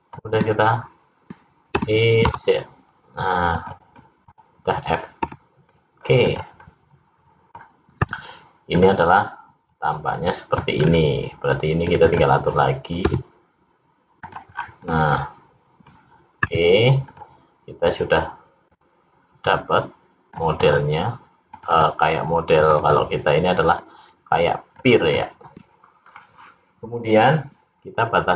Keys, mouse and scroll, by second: 1.7 e, 3.9 middle click, 5.2 f, 5.7 middle click, 6.3 click, 6.6 middle click, 8.0 `, 10.8-11.8 scroll up 4, 11.8 click, 12.1 click, 13.0 s, 14.5-14.8 scroll down 4, 14.8 middle click, 16.3 `, 18.7 click, 20.5 click, 21.5-22.7 click, 22.5 click, 23.8 click, 25.0 click.